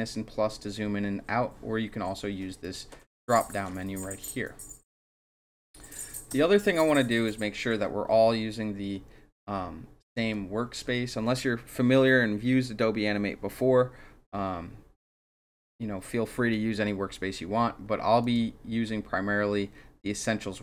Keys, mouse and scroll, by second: 2.6 click, 3.5 click, 6.3 space, 6.6-10.1 drag, 18.2 click.